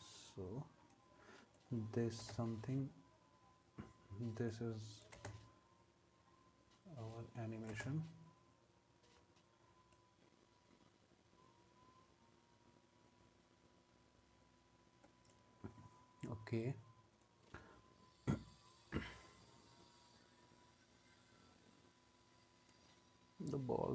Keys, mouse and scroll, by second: 2.2 space, 5.1 space, 7.7 space.